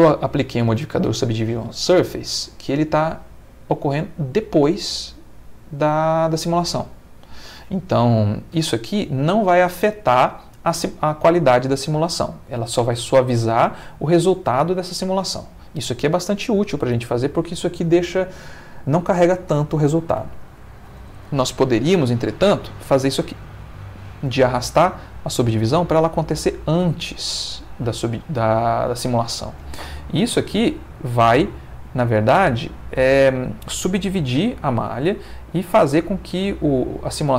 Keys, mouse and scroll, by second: 20.2 Escape, 22.9-25.2 drag, 30.3 space.